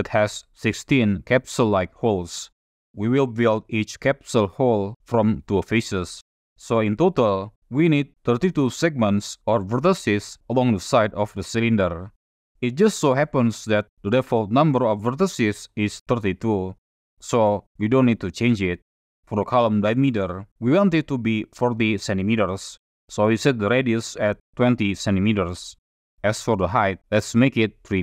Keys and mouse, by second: 20.7-25.5 drag, 26.2-27.4 drag.